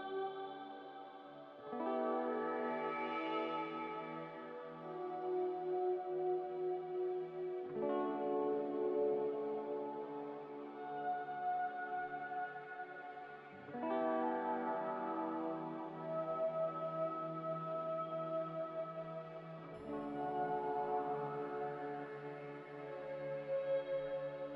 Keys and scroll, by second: 7.1-10.6 typing, 11.9 x, 13.8 n, 21.4 z.